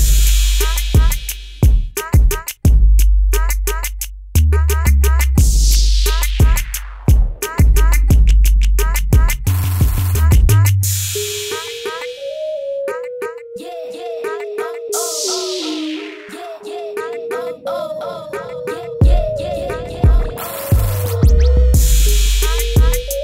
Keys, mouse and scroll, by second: 1.2 b, 1.9 right click, 5.2 click, 8.2 \, 8.8 Return, 9.9 click, 10.8 click, 12.2 right click, 13.2 click, 13.4 Return, 13.9 typing, 15.1 click, 22.2 click.